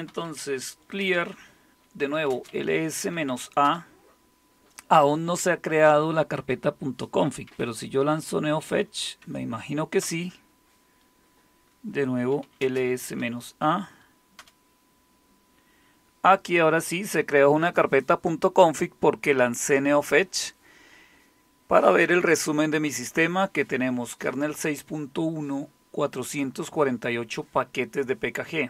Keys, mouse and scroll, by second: 0.0-3.6 typing, 1.0 Return, 7.4-9.2 typing, 9.2 Tab, 10.0 Return, 12.1-14.9 typing.